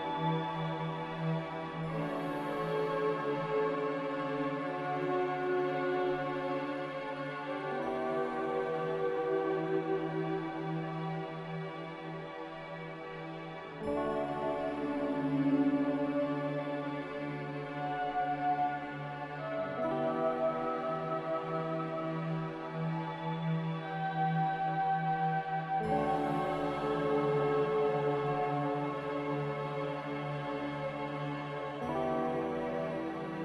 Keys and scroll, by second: 8.3 m, 25.1 ctrl+z, 25.9 ctrl+z, 29.7 z, 31.0 b, 31.9 x.